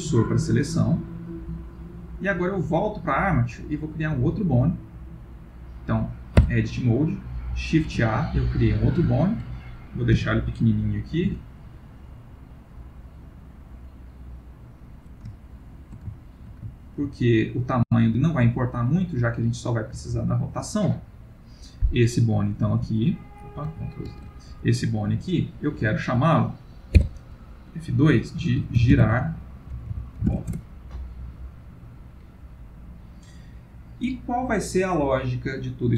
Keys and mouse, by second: 1.0 middle click, 2.6 click, 6.4 Tab, 7.8 shift+a, 8.3 ctrl+middle click, 8.8 ctrl+middle click, 9.2 shift+middle click, 10.1 g, 15.3 ctrl+middle click, 16.1 shift+middle click, 16.7 ctrl+middle click, 17.2 middle click, 22.0 click, 22.9 h, 24.0 ctrl+z, 25.1 g, 26.9 F2, 29.0 r.